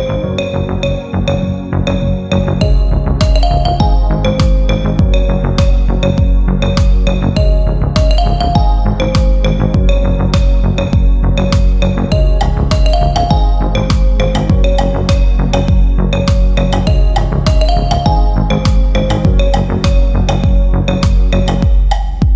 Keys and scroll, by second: 0.8 F3, 6.1 shift+Page_Down, 6.5 shift+F2, 9.0 Escape.